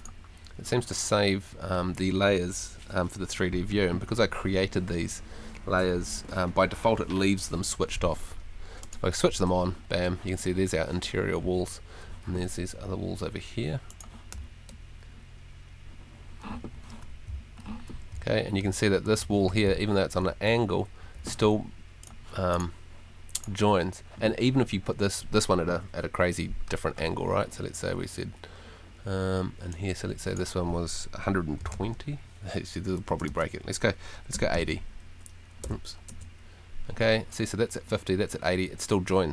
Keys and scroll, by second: 14.3 w, 16.5 shift+d, 17.6 s, 18.1 d, 18.6 w, 19.1 s, 31.4-33.0 typing, 34.1-35.0 typing, 36.1 Return.